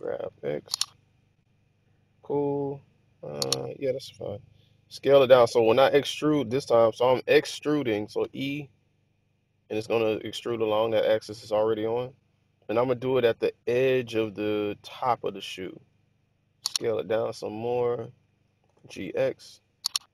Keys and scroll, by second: 0.3 x, 8.1 typing, 16.4 typing, 18.6-18.9 typing.